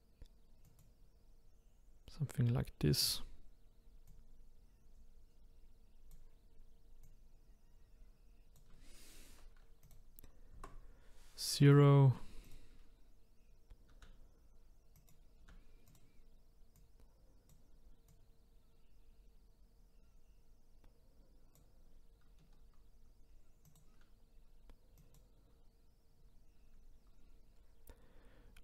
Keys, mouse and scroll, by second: 0.7 click, 4.1-7.1 drag, 9.8 click, 10.5 KP_0, 12.4 click, 13.9 s, 15.4 s, 16.7 click, 18.1 click, 23.7 click, 25.0 click.